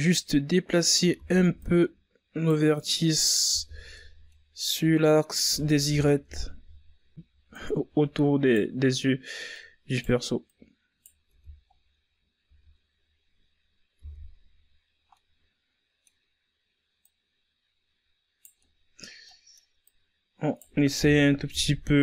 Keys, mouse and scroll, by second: 0.2 KP_1, 0.6 Tab, 1.3-1.9 scroll down 5, 2.1-3.1 scroll up 4, 3.1 Tab, 3.8 right click, 5.8 right click, 6.8 right click, 7.6 Tab, 8.1-8.7 scroll down 5, 8.7 a, 9.4-10.3 scroll up 5, 10.3 Tab, 10.8-11.3 scroll up 2, 11.3 scroll down 2, 11.5-13.3 middle drag, 13.3 right click, 14.9-16.2 middle drag, 16.2 right click, 17.3 KP_1, 17.8 Tab, 18.3-18.7 shift+scroll down 3, 18.7 scroll up 2, 18.9 Tab, 19.7 right click, 21.9 Tab.